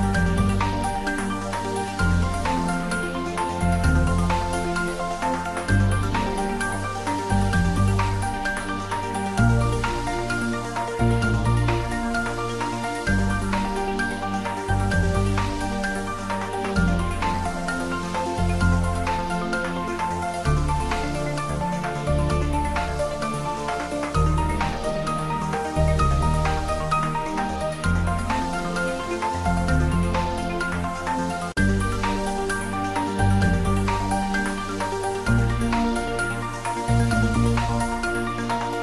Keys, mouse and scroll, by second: 1.1 click, 2.0 shift+d, 7.2 click, 8.7 scroll up 1, 9.3 3, 10.2 s, 10.5 x, 12.0 click, 12.4-14.4 typing, 13.1 Left, 16.1 click, 16.8 space, 17.4 click, 18.3 shift+z, 19.0 shift+z, 19.1-19.5 scroll down 1, 19.7-23.3 middle drag, 23.3 click, 23.8 s, 24.1 y, 24.9 click, 25.3 s, 25.4 z, 26.0 click, 28.3 scroll down 1, 32.3 shift+a, 33.3 click, 34.5 g, 34.7 y, 35.1 x, 36.7 g, 36.8 y, 37.3 click, 37.5 scroll down 1, 37.8 middle click, 38.7 g.